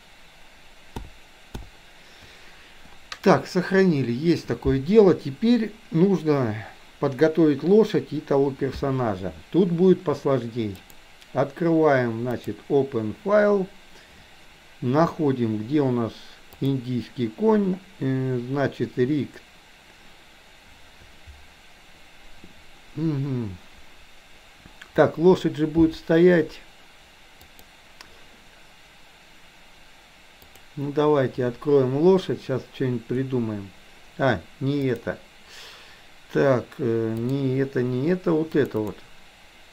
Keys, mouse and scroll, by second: 10.9-12.6 drag, 34.9-37.5 drag.